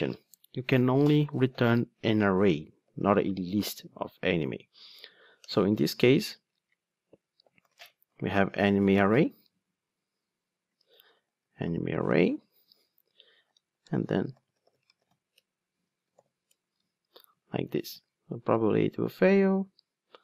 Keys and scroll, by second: 5.4 alt+Return, 13.5 alt+shift+Right, 16.5 Return, 17.9 ctrl+r.